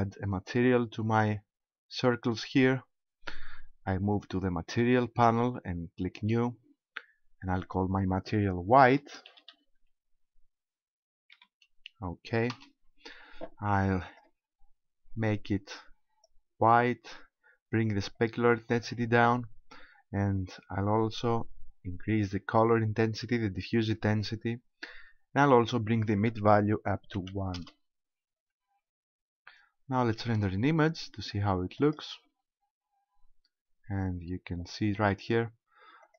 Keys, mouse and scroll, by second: 1.1-1.5 scroll up 3, 4.9 click, 6.2 click, 7.7 click, 14.1 click, 18.1 click, 21.4 click, 26.0 click, 30.3 click, 31.8 click.